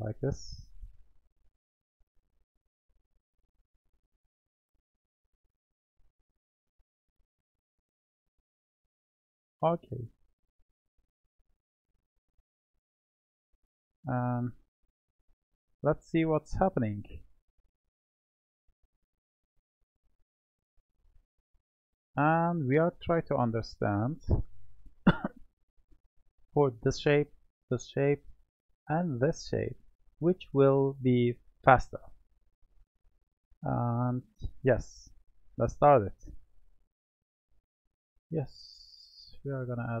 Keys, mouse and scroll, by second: 0.0-0.6 drag, 5.9 click, 13.1-15.1 middle drag, 15.1-16.2 drag, 16.2-17.0 middle drag, 23.9-25.1 drag, 25.1-28.2 middle drag, 35.8-37.0 drag, 38.0-40.0 middle drag.